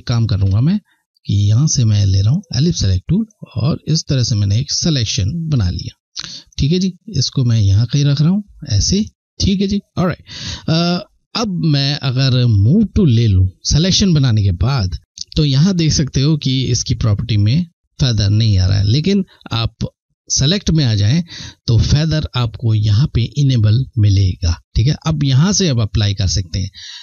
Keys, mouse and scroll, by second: 0.0 ctrl+z, 1.9 click, 2.9 shift+click, 6.2 click, 12.4 click, 19.8 click.